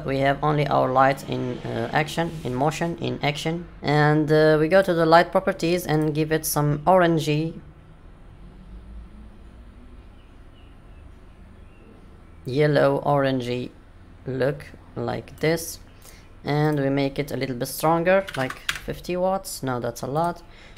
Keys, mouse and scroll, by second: 3.3 middle click, 6.4 click, 15.9 click, 16.6 click, 18.3 click, 20.1 click.